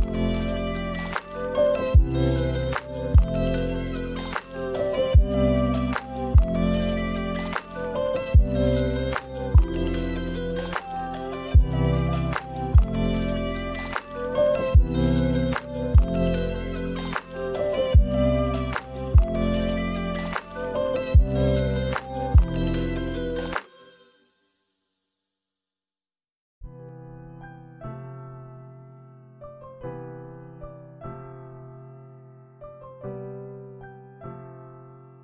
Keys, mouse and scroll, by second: 0.5 middle click, 3.3 click, 4.8 click, 8.9 middle click, 9.1 space, 9.2-9.9 scroll down 3, 10.6 space, 10.7 middle click, 10.9-11.6 scroll up 2, 11.0 middle click, 12.1 click, 12.3 click, 12.4 click, 12.8 click, 12.9 click, 13.1 middle click, 13.5 scroll down 1, 13.6 middle click, 13.9 space, 15.2 click, 15.9 space, 16.5 space, 16.7 click, 17.3 space, 19.0 space, 19.1 middle click, 19.3 scroll down 1, 19.4 middle click, 19.7 middle click, 20.0 shift+middle click, 20.2 middle click, 20.7 click, 21.3 click, 22.1 middle click, 22.4 shift+a, 27.3 click, 28.8 click, 31.2 shift+a.